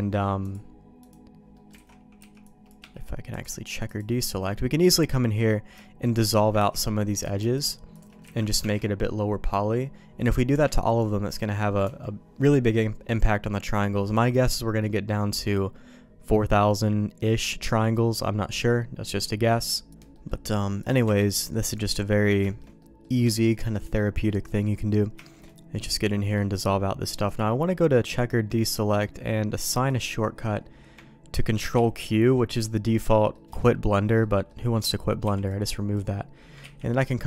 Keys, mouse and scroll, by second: 1.5 middle click, 1.8 alt+a, 2.2 c, 3.3 click, 4.8 middle click, 5.8 shift+middle click, 6.6 ctrl+x, 7.2 click, 7.5 shift+click, 8.3 ctrl+x, 8.6 Tab, 10.5 Tab, 11.8 Tab, 20.1 middle click, 20.4 middle click, 20.8 click, 21.0 Tab, 21.3 middle click, 21.6 middle click, 22.4 shift+middle click, 23.3 shift+middle click, 24.2 middle click, 25.2 shift+middle click, 25.8 middle click, 27.4-32.8 drag, 33.1 middle click, 33.6 shift+middle click, 34.2 middle click, 35.2 b, 36.6 ctrl+q.